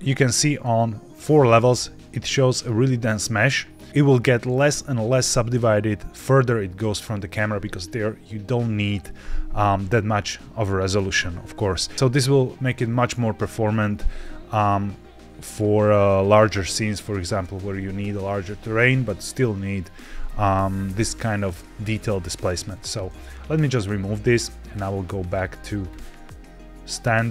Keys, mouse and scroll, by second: 22.6 click, 24.5 click.